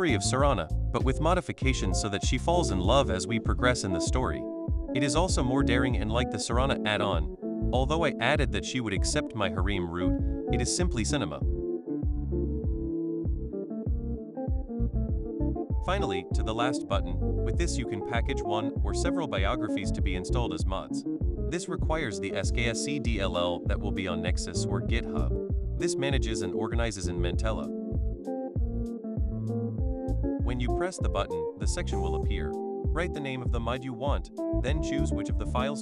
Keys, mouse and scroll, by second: 30.3 click, 31.8 click, 32.9 s, 33.4 e, 34.9-35.8 typing.